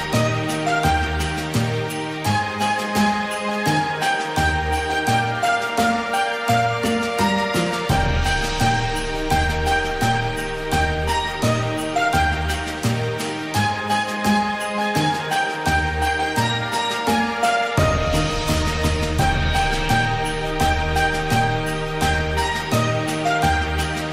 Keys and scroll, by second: 3.7 ctrl+shift+[.